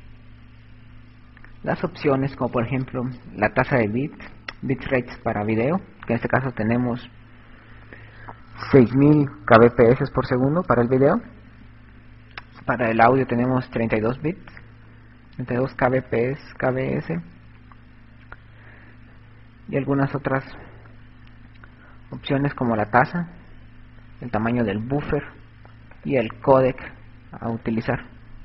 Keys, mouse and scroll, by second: 26.0 right click.